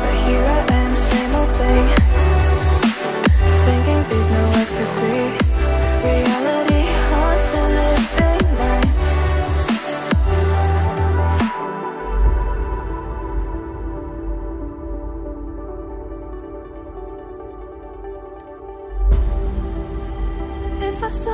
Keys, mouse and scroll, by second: 15.9-17.7 typing, 19.9-21.3 typing.